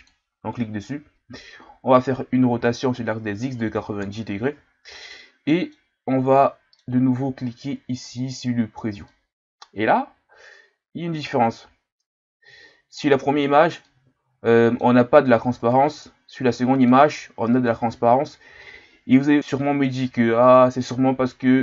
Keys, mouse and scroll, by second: 1.5-2.1 scroll up 1, 2.1-2.5 scroll up 1, 2.5 r, 5.0-5.9 middle drag, 5.9-6.4 scroll up 2, 6.4-8.3 middle drag, 9.1-12.6 middle drag, 13.4-13.8 scroll down 4, 13.8-21.2 middle drag, 21.2-21.6 drag.